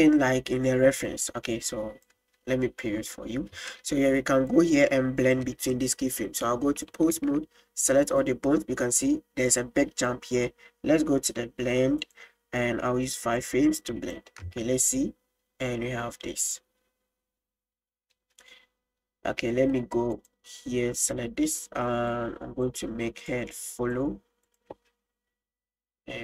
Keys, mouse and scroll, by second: 4.6 click, 6.1-6.9 drag, 7.2 a, 12.1 click, 13.3 click, 13.9 click, 14.6 space, 16.6 click, 18.2 space, 20.2 click, 21.0 right click, 22.1 click, 23.3 click, 24.6 drag, 24.8 space.